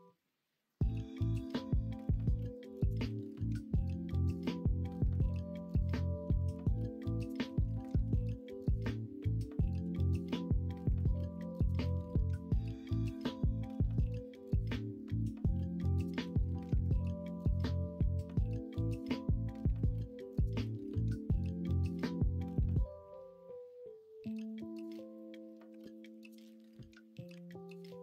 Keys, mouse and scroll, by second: 4.3 middle click, 5.2 Tab, 6.2 s, 7.6 z, 8.2-9.2 ctrl+right drag, 8.7 ctrl+z, 9.8 ,, 11.1 middle click, 11.3 ,, 11.7 s, 13.5-15.0 middle drag, 18.2 r, 23.9 middle click, 27.3 3.